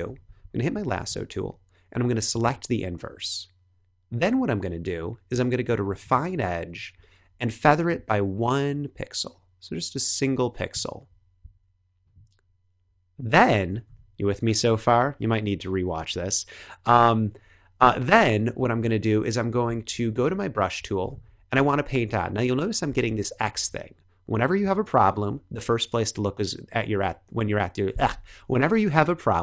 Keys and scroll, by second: 0.3 l, 13.8 b, 23.0 Up, 25.2 Up.